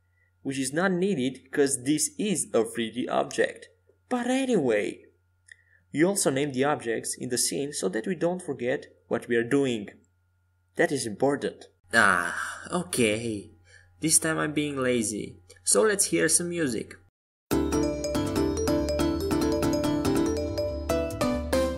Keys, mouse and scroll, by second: 3.9-6.6 drag, 8.6 KP_1, 10.6-12.9 right drag, 13.7 KP_1, 14.1 KP_3, 16.0-18.1 typing.